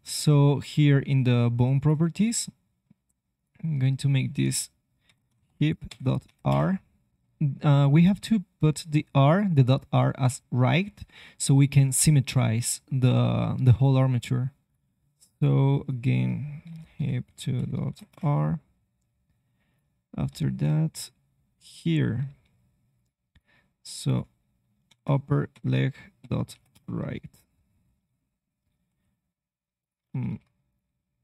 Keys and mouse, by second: 20.3 middle click, 20.6-21.6 drag, 20.6 e, 22.4 g, 23.0-26.7 drag, 28.1 middle click, 28.8 click, 28.8 e, 30.0 ctrl+z, 30.2 ctrl+z, 30.6 click.